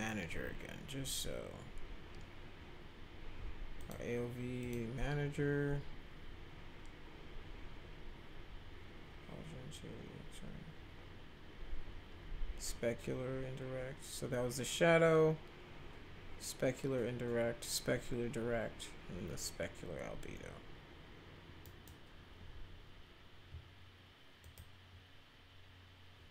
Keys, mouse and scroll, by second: 3.7 click, 4.6 click, 21.6 right click, 24.4 click.